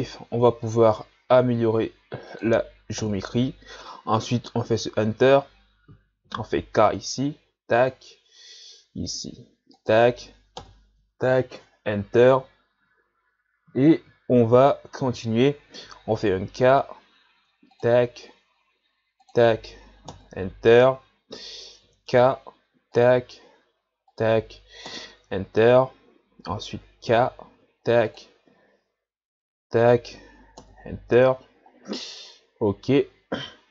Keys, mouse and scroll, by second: 6.2 k, 16.3 k, 21.8 k, 27.1 k, 32.0-33.7 scroll down 2.